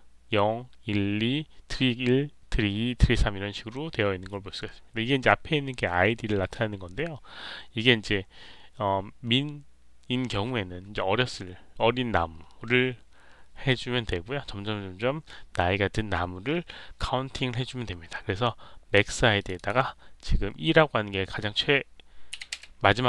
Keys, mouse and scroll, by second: 19.3 click, 19.5 click.